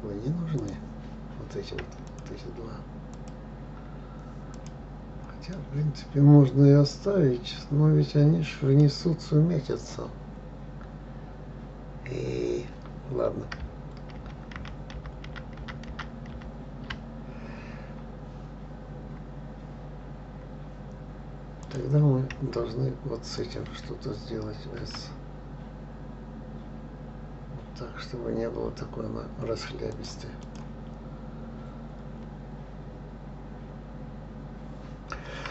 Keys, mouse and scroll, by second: 1.0 click, 2.5 click, 3.5 shift+click, 4.9 click, 5.9-9.0 middle drag, 14.6 ctrl+z, 14.9 ctrl+z, 15.4 ctrl+z, 15.6 ctrl+z, 16.0 ctrl+z, 16.3 ctrl+z, 16.7 ctrl+z, 19.1-22.0 scroll down 3, 22.0 click, 23.8 shift+click, 25.2 s, 30.8 click, 32.1-32.5 scroll up 3, 34.4-35.5 scroll down 1.